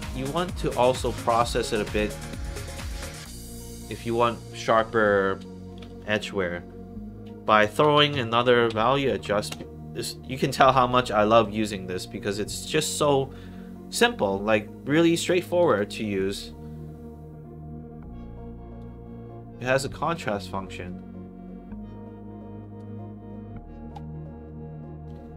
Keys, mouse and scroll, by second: 1.0 click, 1.6 click, 1.9 middle click, 2.3 scroll up 1, 2.8 click, 3.4 scroll up 2, 3.8 middle click, 4.7 Tab, 7.4-8.6 typing, 9.1 Down, 10.8 click, 11.3 click, 15.1 click, 15.4 click, 15.6 click, 18.7-20.1 drag, 24.3 middle click, 25.2 scroll down 2.